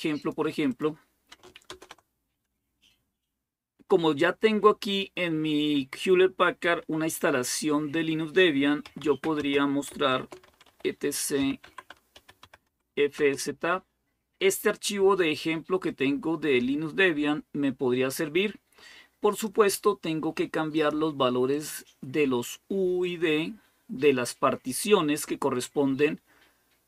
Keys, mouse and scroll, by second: 0.0 click, 1.5 super+Return, 8.4-13.0 typing, 15.7-19.7 drag, 20.5 click, 21.3-24.2 drag, 24.4-25.1 typing, 24.6 click.